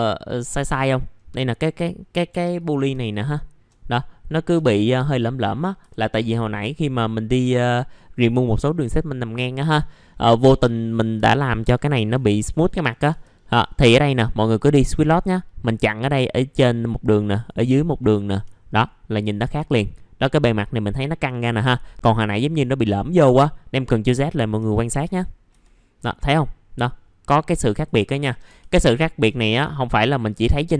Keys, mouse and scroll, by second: 1.0-2.3 scroll up 1, 2.3 4, 2.5 click, 3.1 shift+click, 5.0 scroll down 1, 5.8 F4, 6.3-7.9 scroll up 1, 10.1 middle click, 10.6-11.1 scroll up 1, 11.1 F4, 12.1-12.8 scroll down 1, 13.1 F4, 13.4 middle click, 13.7-14.4 scroll up 1, 14.4 click, 17.9 right click, 18.3 F4, 18.6 scroll down 1, 19.7-23.5 scroll up 1, 28.2-28.8 scroll up 2, 28.4 F4, 29.8 click.